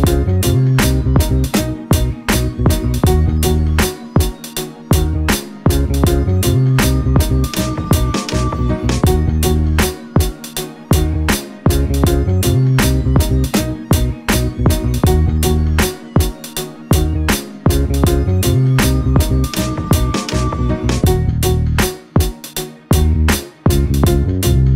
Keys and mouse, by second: 0.6-2.8 drag, 6.7 click, 7.1 click, 7.3 click, 8.4 click, 8.9-13.0 drag, 14.8-17.2 drag, 18.1 click, 22.2-23.3 drag, 24.5 click.